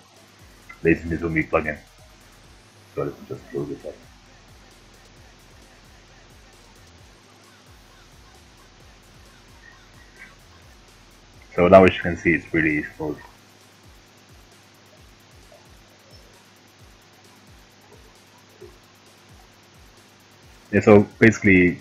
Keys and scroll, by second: 19.0 ctrl+alt+z.